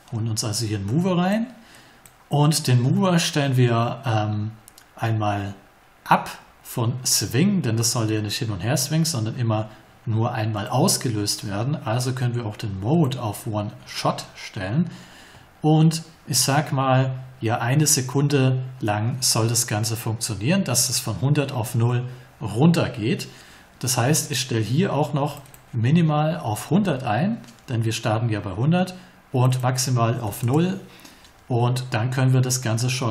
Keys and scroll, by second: 26.2-27.1 typing, 30.2 0, 30.4 Return.